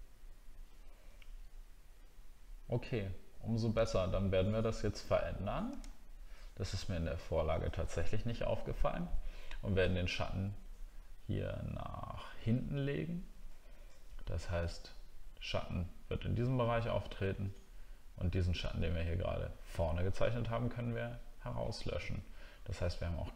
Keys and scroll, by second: 5.8 alt+scroll up 1, 6.6 alt+scroll down 1.